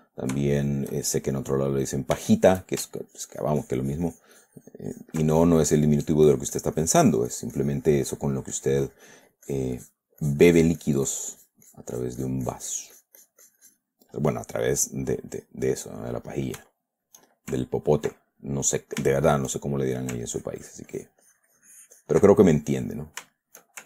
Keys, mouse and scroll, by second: 0.9 shift+middle click, 1.6 shift+click, 2.1 click, 2.5 shift+middle click, 3.4-5.6 ctrl+shift+drag, 5.7-10.5 ctrl+drag, 10.6-14.4 drag, 14.5 click, 15.3 middle click, 15.4 click, 15.5-16.9 middle drag, 17.1 shift+middle click, 18.6 ctrl+middle click, 19.4 shift+middle click, 20.6-23.2 ctrl+drag, 23.5 shift+middle click.